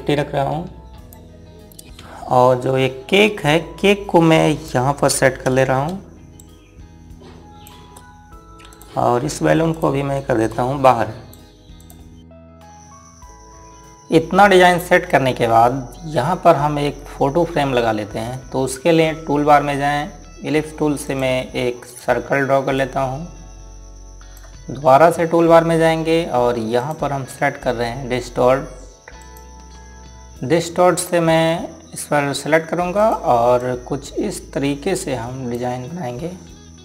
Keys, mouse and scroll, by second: 0.4 click, 9.2 click, 21.9 click, 27.6 click, 30.0 click, 33.8 click.